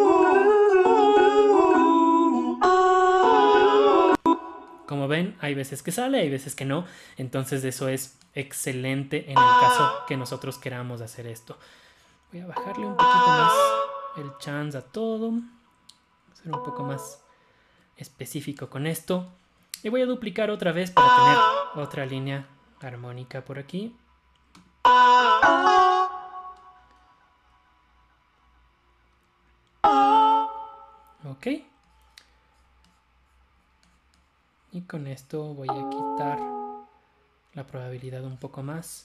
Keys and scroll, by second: 29.7 Up.